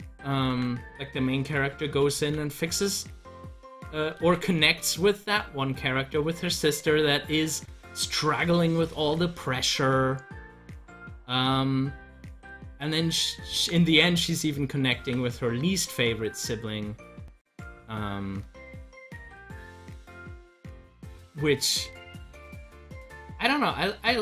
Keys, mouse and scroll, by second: 0.5 ctrl+z, 2.1 z, 3.3 click, 4.2 ctrl+z, 8.9 ctrl+z, 13.5 ctrl+z, 14.9 ctrl+z, 21.9 ctrl+z, 23.1-24.2 drag.